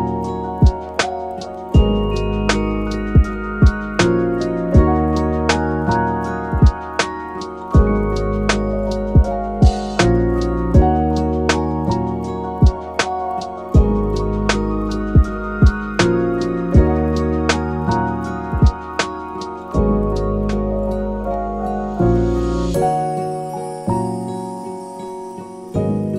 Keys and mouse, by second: 0.0-0.4 middle drag, 0.9 middle click, 1.6-2.1 drag, 2.2 click, 2.6 click, 3.6-4.1 drag, 4.7 shift+middle click, 5.1 shift+a, 6.0 p, 7.0 shift+a, 10.3 drag, 11.0-11.7 drag, 12.1 click, 12.8-13.2 drag, 13.5 middle click, 14.2-14.9 drag, 15.8-16.4 drag, 16.5 middle click, 17.3-18.1 drag, 18.2 click, 18.9 click, 20.0 click, 21.5-22.6 drag, 23.6-25.3 drag.